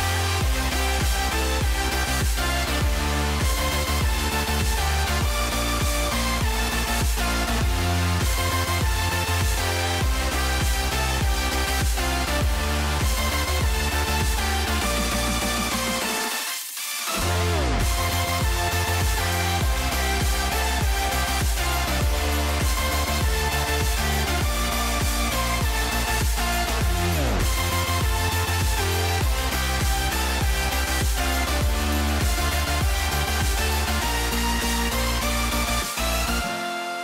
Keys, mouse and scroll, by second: 3.1 shift+middle click, 3.9 g, 6.2 middle click, 6.8 middle click, 8.3 shift+middle click, 9.5 shift+middle click, 10.1 middle click, 10.4 ctrl+z, 11.1 middle click, 11.5 shift+middle click, 12.2 shift+middle click, 12.9 shift+middle click, 13.8 click, 14.4 shift+middle click, 14.8 shift+middle click, 15.3 shift+middle click, 16.3 s, 19.0 middle click, 19.5 middle click, 20.5 s, 22.4 middle click, 22.9 shift+middle click, 23.4 shift+middle click, 23.7 shift+middle click, 24.4 g, 28.3 middle click, 28.5 shift+middle click, 28.7 shift+middle click, 29.2 shift+middle click, 29.4 click, 31.4 shift+middle click, 32.2 s.